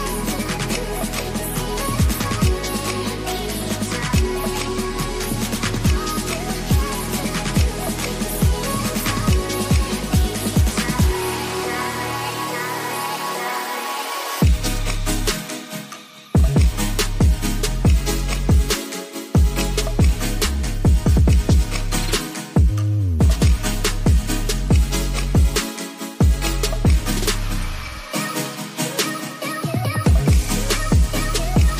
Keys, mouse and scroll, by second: 0.3 middle click, 3.9 click, 5.7 click, 7.5-9.0 drag, 11.6 click, 11.9 click, 12.6 ctrl+s, 12.8-13.2 middle drag, 15.6-16.7 drag, 17.6-18.6 drag, 19.5 click, 20.7 middle drag, 21.4 ctrl+s, 21.8 shift+a, 25.5-26.6 drag, 29.9 ctrl+middle click, 31.2 ctrl+s.